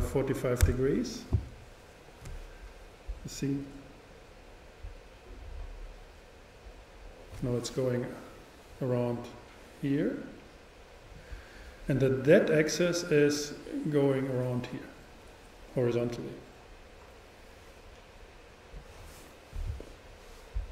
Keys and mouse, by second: 3.5-5.2 drag, 5.3 click, 12.6-14.3 drag.